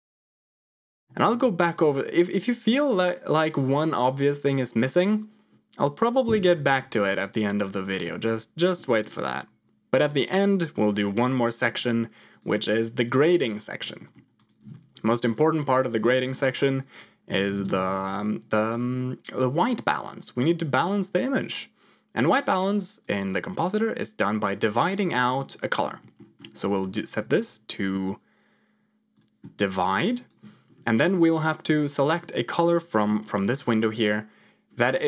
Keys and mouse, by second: 1.6 click, 8.0 middle click, 9.9 click, 10.9 g, 13.9 middle click, 14.3 click, 15.0 shift+a, 22.1 click, 23.5 click, 25.1 ctrl+click, 25.9 middle click, 26.8-29.2 drag, 29.8 ctrl+click, 31.6 middle click, 33.0 KP_0.